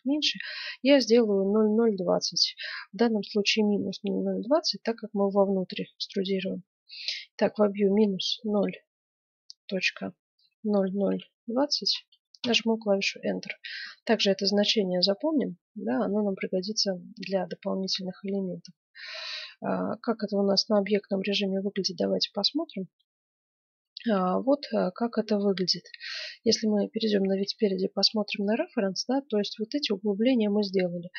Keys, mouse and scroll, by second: 18.8 middle click, 19.5 Tab, 21.5-22.9 middle drag, 23.8-25.6 middle drag, 25.8 middle click, 25.8 KP_1, 26.8-29.0 middle drag.